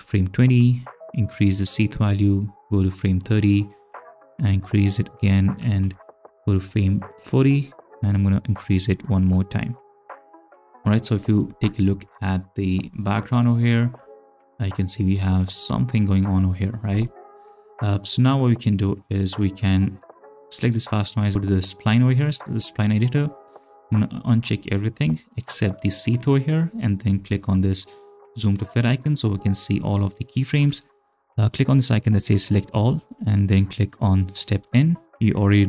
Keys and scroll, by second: 14.0 space, 16.9 space.